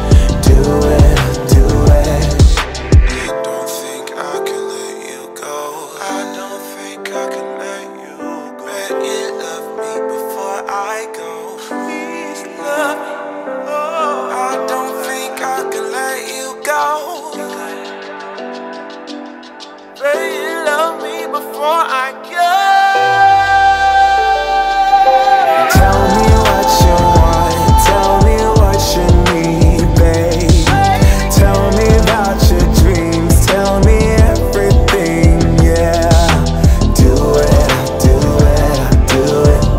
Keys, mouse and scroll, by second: 1.8 scroll down 1, 3.0 shift+click, 7.3 click, 9.2 space, 16.3 space, 22.7 click, 23.2 space, 28.2 space, 31.5 space, 33.0 scroll up 1, 34.2-37.7 drag, 38.5 shift+r, 39.4-39.7 drag.